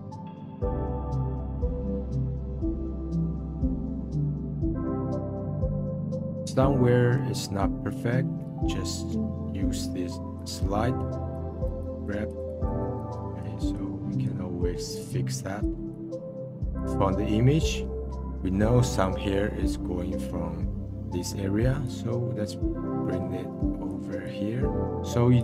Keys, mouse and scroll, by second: 0.3-0.9 drag, 1.2-1.6 drag, 1.6 middle click, 1.9 click, 2.0 middle click, 2.2 click, 2.3 middle click, 3.0 click, 3.1 middle click, 3.3 click, 3.3 middle click, 3.5 click, 3.6-3.9 middle drag, 3.9 click, 4.0 middle drag, 4.3 click, 4.3 middle click, 4.5-5.0 drag, 5.0 middle click, 5.5 click, 5.6 middle drag, 5.8 drag, 6.0 middle drag, 6.2 click, 6.3-10.3 middle drag, 10.3 click, 10.7 scroll up 2, 11.3-14.4 drag, 14.4-15.0 middle drag, 15.0-17.8 drag, 21.8-25.4 drag.